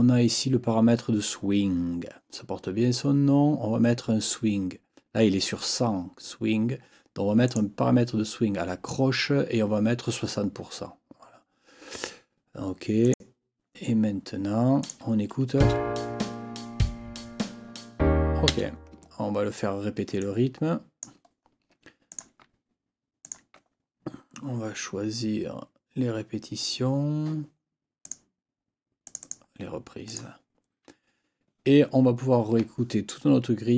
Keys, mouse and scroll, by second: 7.4 click, 13.0 click, 14.8 click, 15.6 space, 18.5 space, 20.2 ctrl+click, 21.3 ctrl+scroll down 2, 22.1 ctrl+click, 23.2 shift+click, 28.0 click, 29.0 click, 30.1 click.